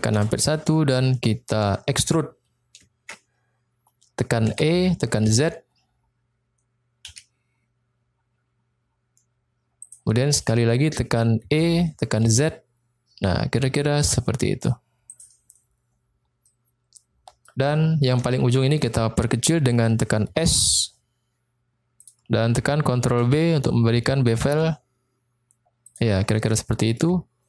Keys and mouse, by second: 0.1 KP_1, 1.7 shift+middle click, 4.4 e, 5.3 z, 7.1 z, 9.9 click, 11.5 e, 12.2 z, 15.1 click, 16.5 middle click, 18.2 shift+middle click, 20.3 s, 22.0 click, 23.0 ctrl+b, 25.8 click, 26.5 middle click.